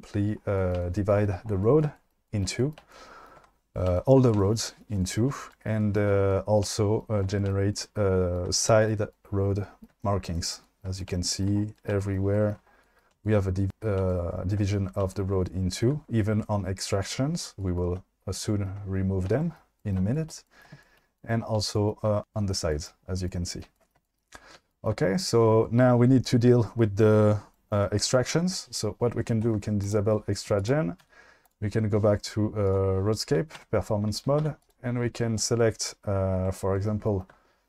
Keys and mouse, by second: 29.9 click, 30.6 click, 31.0 q, 32.7 click, 33.6 Tab, 34.4 2, 34.7 click, 37.0 shift+middle click.